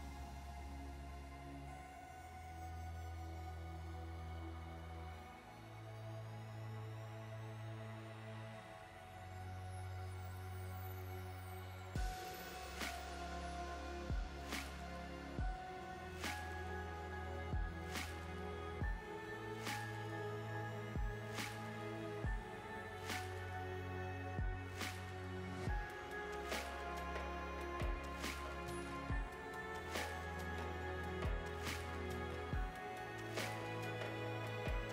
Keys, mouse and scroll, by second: 0.4 click, 1.0 click, 2.4 space, 3.5 click, 5.1-9.3 scroll up 30, 26.7 space, 27.5 click, 28.1 scroll up 2, 28.7-30.2 scroll down 13, 30.1 scroll up 3, 30.3 scroll down 1, 30.7-31.3 scroll up 2, 33.1-34.1 scroll up 3, 34.1 click.